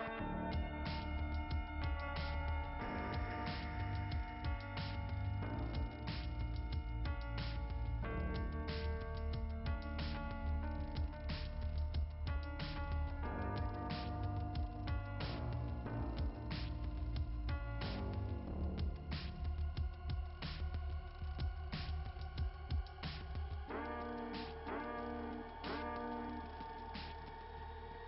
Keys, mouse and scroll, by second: 10.2 click, 12.3 click, 12.5 click, 12.7 click, 14.1 click, 15.2 click, 17.9 click, 19.4 click, 20.0 click, 21.4 click, 22.2 click, 22.9 click, 23.7 click, 27.1-28.0 typing.